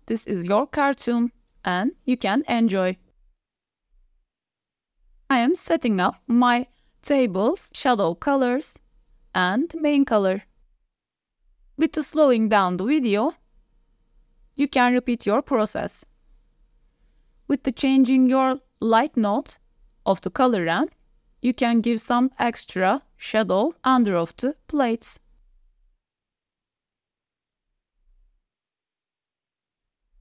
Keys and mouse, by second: 0.2-0.6 drag, 3.5 click, 8.8-10.6 drag, 10.8 q, 15.7-16.2 drag, 17.3 click, 17.7-18.7 drag, 20.7-21.3 drag, 24.2 click, 25.5-29.3 drag, 29.6-30.2 drag.